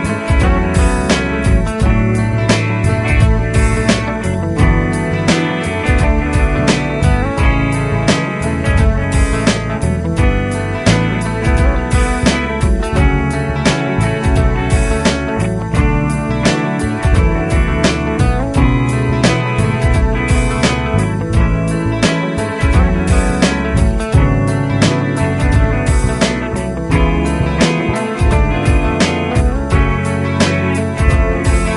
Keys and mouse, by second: 7.6 ctrl+Down, 7.9 ctrl+Down, 10.1 ctrl+Up, 14.1 ctrl+q, 16.2 Down, 16.4 Down, 26.9 ctrl+Up, 27.3 ctrl+Up.